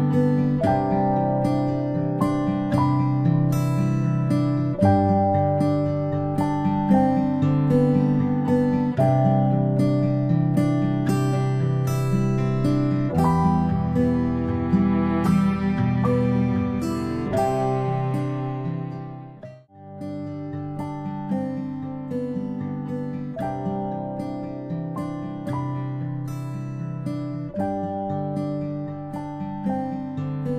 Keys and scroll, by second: 2.8 ctrl+[, 7.7 Left, 8.0 Left, 8.5 Right, 8.8 Right, 18.2-18.6 ctrl+space.